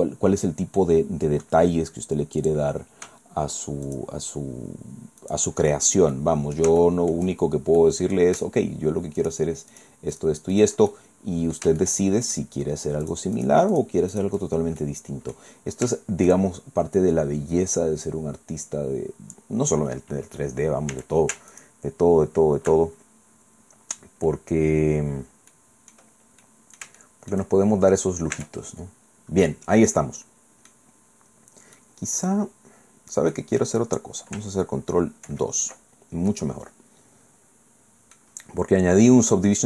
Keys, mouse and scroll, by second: 2.4 click, 3.9 shift+right click, 5.2 shift+right click, 6.1 click, 6.8 shift+middle click, 7.4-7.8 shift+scroll up 1, 7.8 middle click, 9.2 shift+right click, 9.7 shift+right click, 10.1 shift+right click, 10.5 shift+right click, 10.9 shift+middle click, 11.2 shift+scroll down 1, 11.8 shift+click, 13.1 shift+right click, 13.7 shift+right click, 14.1 shift+right click, 14.5 shift+scroll down 2, 14.8 shift+click, 15.5 middle click, 15.9 shift+click, 17.7-19.5 drag, 20.9 a, 21.5 alt+shift+right click, 25.5 click, 26.1 scroll down 1, 26.4-27.5 drag, 27.6 shift+scroll up 1, 28.3 Tab, 28.7-29.2 scroll down 1, 29.9 scroll down 1, 29.9-30.9 drag, 31.8-33.5 drag, 35.3 ctrl+2, 35.8-36.1 ctrl+scroll down 2, 36.3 click, 36.5 scroll down 2, 36.7-39.3 middle drag.